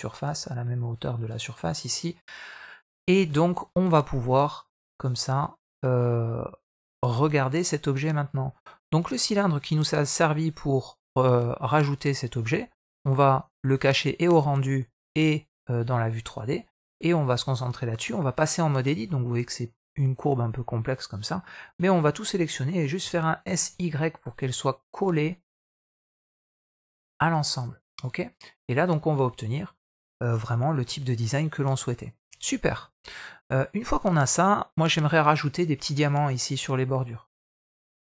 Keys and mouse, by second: 0.7 middle drag, 2.1-2.9 middle drag, 3.4 middle click, 4.8 click, 5.6-8.1 middle drag, 12.8 click, 13.2 click, 15.9 middle click, 16.4 click, 16.9 middle click, 17.9 Tab, 18.9 middle click, 19.7 middle click, 22.8 s, 27.5 Tab, 27.7-28.6 middle drag, 29.0-29.8 middle drag, 30.2 alt+a, 30.7-31.5 middle drag, 32.3 middle drag.